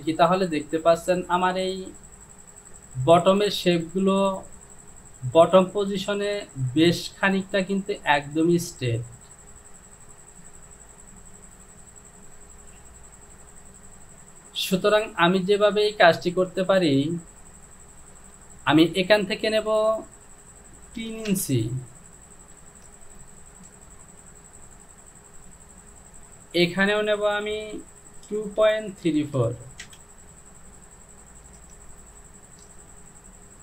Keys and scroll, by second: 21.2 KP_3, 21.3 Return, 28.5 KP_2, 28.7 KP_Decimal, 29.1 KP_7, 29.4 KP_5, 29.9 Return.